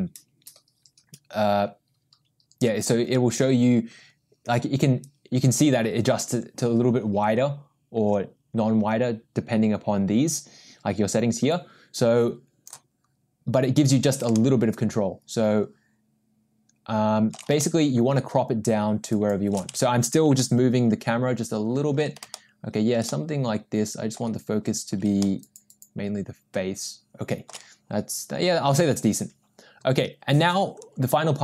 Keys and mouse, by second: 5.0-12.7 drag, 14.3-17.3 ctrl+middle drag, 17.6-19.5 shift+middle drag, 20.4-22.0 ctrl+middle drag, 22.3 shift+middle click, 23.1-24.2 middle drag, 25.2-27.5 ctrl+middle drag.